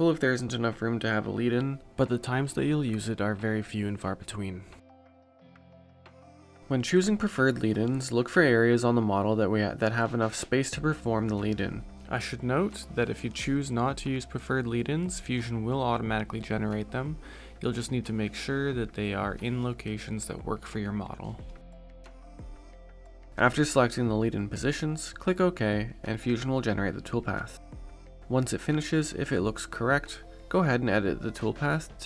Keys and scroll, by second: 0.3 0.